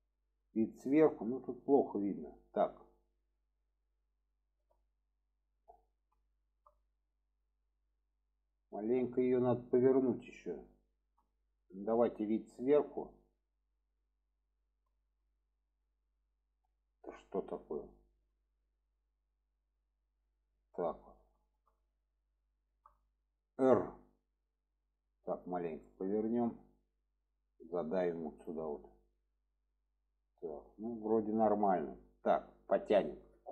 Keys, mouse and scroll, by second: 0.5-1.0 shift+middle drag, 1.6-2.1 middle drag, 2.3-2.8 middle drag, 3.1-5.5 middle drag, 6.3 shift+middle drag, 6.8-7.3 middle drag, 7.6-11.6 middle drag, 12.1-13.9 alt+middle drag, 14.7 alt+middle click, 15.3-16.0 alt+middle drag, 16.2-17.5 middle drag, 17.8-20.2 middle drag, 21.3 shift+middle drag, 22.5 shift+middle drag, 26.7 click, 29.1-32.1 middle drag.